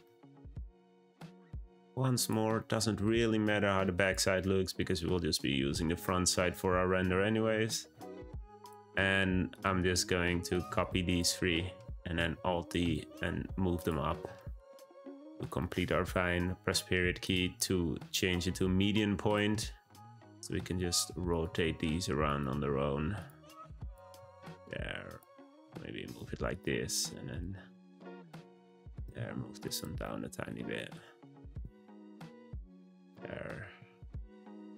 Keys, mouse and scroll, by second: 0.8 click, 1.0 g, 2.1 click, 2.6-3.3 middle drag, 3.3 g, 4.3-7.3 middle drag, 7.9 `, 8.6 click, 9.5 click, 10.5 click, 10.8 shift+click, 11.1 shift+click, 12.2 alt+d, 14.4-16.4 shift+middle drag, 16.4 ., 18.8-19.3 middle drag, 19.3 click, 19.5 `, 20.5 r, 21.5 g, 22.4 r, 23.8 click, 24.0 g, 25.3 r, 26.5 click, 26.8 g, 27.6 r, 29.0 g, 30.0-31.3 middle drag, 31.3 r, 32.4 middle click, 32.7 `, 33.7 z.